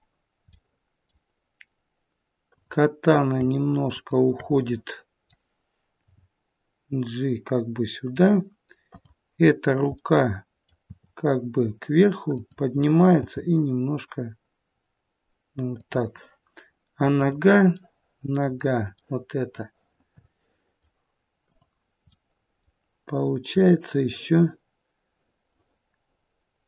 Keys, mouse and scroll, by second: 0.4 middle click, 2.4 click, 3.8 shift+click, 4.5 middle click, 6.0 g, 8.8 click, 9.9 middle click, 10.7 r, 13.1 g, 17.0 click, 17.7 middle click, 18.8 middle click, 21.3 click, 23.5 middle click.